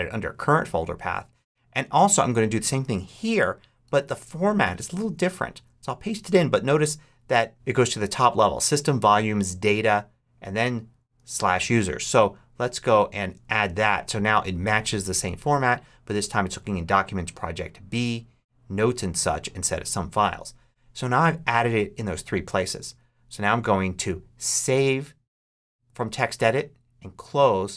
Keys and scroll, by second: 3.2 Return, 3.7 Tab, 5.0 super+Tab, 5.4 super+v, 11.2 super+c, 13.1 super+v.